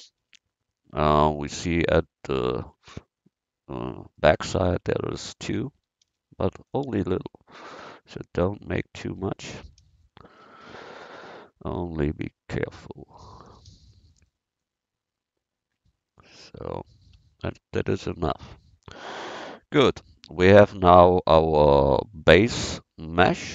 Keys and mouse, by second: 0.2 KP_1, 4.9 Tab, 5.5 a, 6.1 c, 9.5 a, 9.8 c, 13.4 a, 13.7 c, 17.1 Tab.